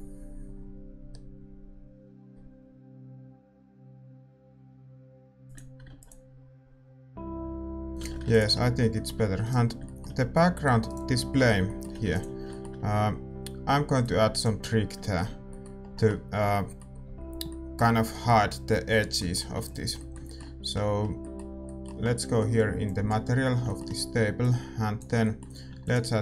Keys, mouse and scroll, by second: 5.4-8.0 drag, 8.0 ctrl+s, 8.0 shift+z, 8.5 ctrl+s, 8.5-14.0 middle drag, 14.0-16.5 drag, 16.5 middle click, 17.2-26.2 middle drag, 20.3 ctrl+s.